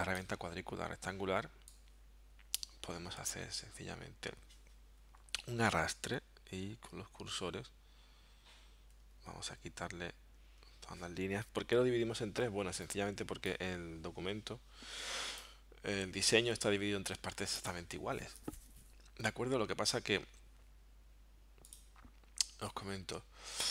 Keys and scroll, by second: 5.6 Down, 7.6 Up, 8.5 Down, 8.8 Left, 10.6 Left.